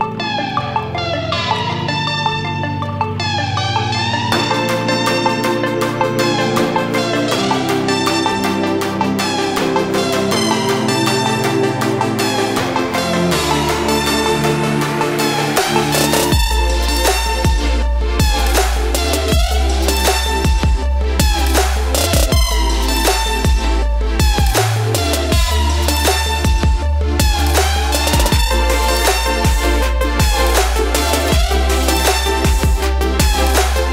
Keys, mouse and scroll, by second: 1.3 click, 1.3 typing, 3.9 typing, 5.3 click, 7.7 Return, 11.3 click, 14.9 Return, 16.5 click, 18.5 click, 25.0 click, 28.1 click, 31.4 click.